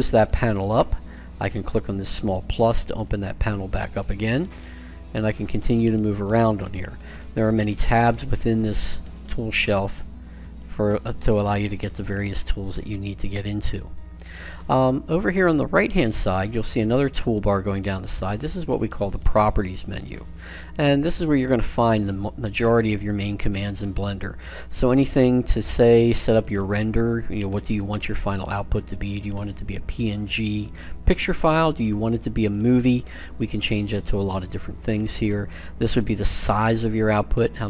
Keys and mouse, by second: 2.4-5.5 drag, 5.6 click, 7.0-13.6 drag, 16.8-18.5 drag, 18.6-20.5 drag, 32.3-34.1 drag.